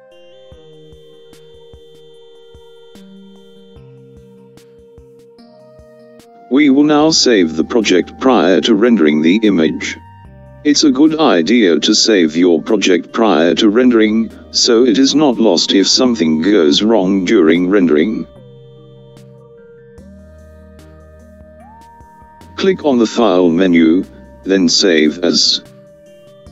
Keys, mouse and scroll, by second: 0.2-1.8 scroll down 3, 4.5 click, 23.0-26.5 drag.